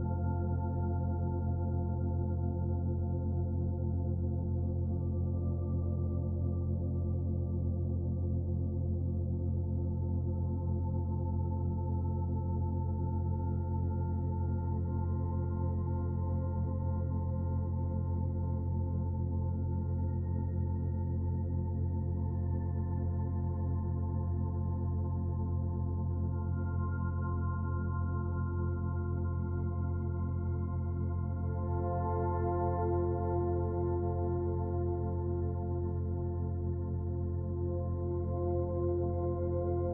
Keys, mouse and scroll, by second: 1.7 ctrl+r, 3.5 ctrl+r, 5.2 middle click, 6.0 middle click, 6.9 ctrl+r, 13.1 ctrl+r, 15.6 ctrl+r, 21.1 ctrl+r, 23.7 ctrl+r, 27.5 ctrl+r, 29.4 ctrl+r, 33.1 ctrl+r, 36.6 alt+click, 38.6 click.